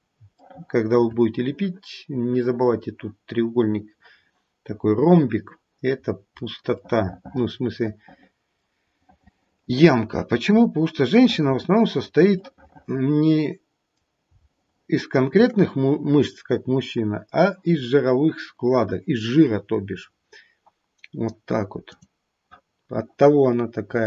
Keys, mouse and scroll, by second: 0.4 shift+middle click, 5.9-6.7 scroll down 4, 6.8 middle click, 9.0 middle click, 10.4-11.7 scroll up 1, 11.7 middle click, 11.7 scroll up 1, 11.9-13.6 scroll down 3, 12.3-13.6 scroll up 1, 13.6 middle click, 14.5 shift+middle click, 15.2 middle click, 22.0 click, 22.7-23.3 scroll up 2, 23.3-24.0 scroll up 1.